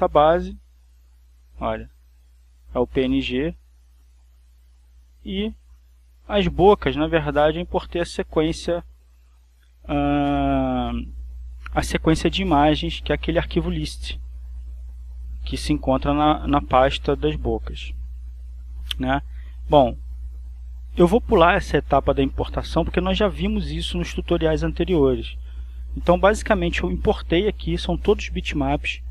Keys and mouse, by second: 1.6 click, 2.2 click, 4.5 click, 5.1 click, 5.9 click, 7.0 click, 8.0 click, 18.6 click, 20.1-21.1 drag.